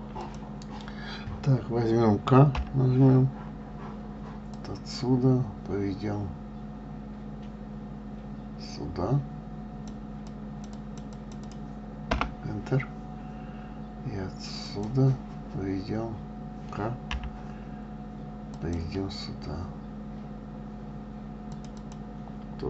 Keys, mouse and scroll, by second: 0.5 click, 2.8 k, 14.9 click, 17.4 k.